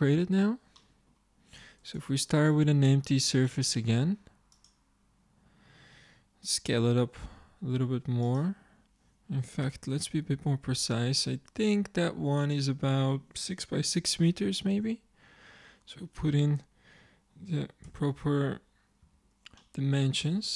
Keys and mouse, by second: 1.8-2.8 middle drag, 2.8 click, 3.7 shift+a, 5.4-6.8 middle drag, 6.8 s, 9.7 n, 11.1-12.5 middle drag, 12.5-14.3 drag, 17.9 n, 19.1 t, 20.3 Tab.